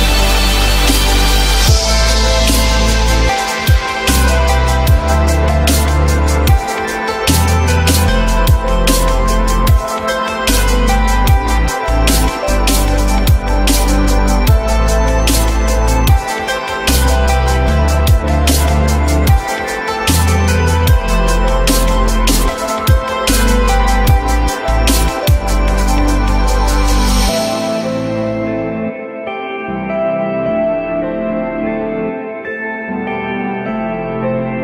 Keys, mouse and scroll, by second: 1.4 F3, 2.0 F3, 2.9 alt+middle click, 4.4 alt+middle click, 6.4 alt+middle click, 7.1-7.6 alt+scroll down 1, 9.0 alt+middle click, 9.4 alt+scroll up 1, 16.4 F4, 17.5 alt+middle click, 18.1 alt+middle click, 18.7 F4, 20.0 alt+middle click, 20.7 alt+middle click, 22.3 F4, 23.5 alt+middle click, 23.9 alt+middle click, 24.7 j, 26.1 alt+middle click, 34.3 F3.